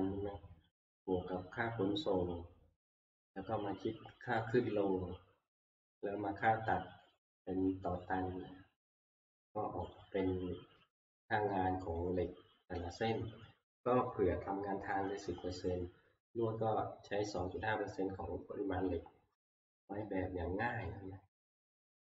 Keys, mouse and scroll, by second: 4.5 click, 7.2 click, 8.0 click, 10.0 click, 12.0 click, 17.5 click, 20.9 click.